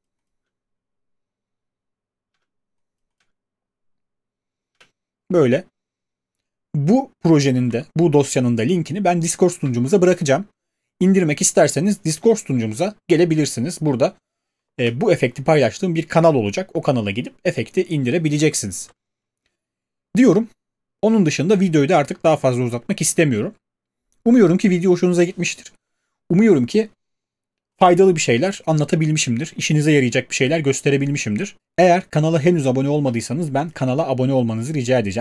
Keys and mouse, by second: 0.5 space, 2.3 space, 3.2 space, 4.7 space.